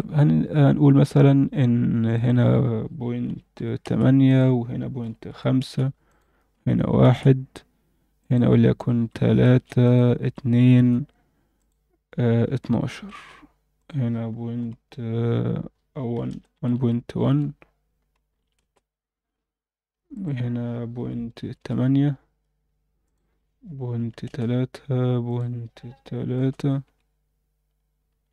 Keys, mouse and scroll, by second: 2.1-3.9 drag, 4.2-5.6 drag, 6.1-7.1 drag, 8.2-9.5 drag, 9.8 click, 11.6-13.1 drag, 13.8-18.6 drag, 16.7 1, 20.1-21.6 drag, 23.0-24.3 drag, 25.2-26.4 drag.